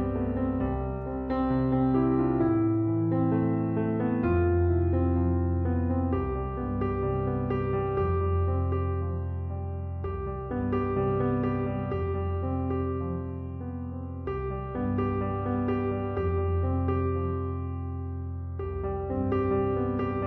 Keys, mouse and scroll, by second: 0.8 4, 1.0 5, 1.5 Return.